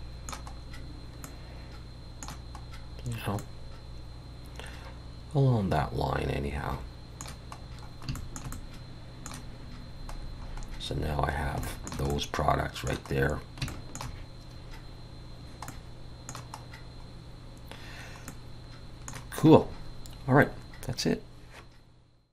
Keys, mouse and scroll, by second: 0.6-1.2 scroll up 2, 1.2 middle click, 2.6 scroll up 2, 3.1 scroll down 2, 3.4 middle click, 7.7-8.1 scroll up 1, 8.1 shift+middle click, 8.7 middle click, 10.2-10.8 scroll down 5, 11.6 shift+middle click, 12.1 middle click, 13.1 scroll up 2, 13.7 shift+middle click, 15.7 middle click, 16.6 scroll up 2, 17.8 scroll down 1, 18.3 middle click.